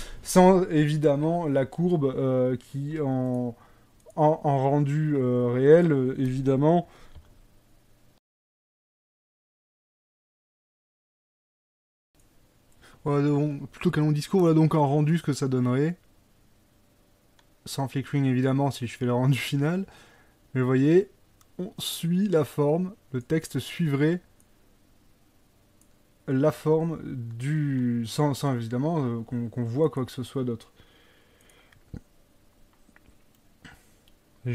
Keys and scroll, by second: 0.3 Escape, 1.3 Escape, 7.2 g.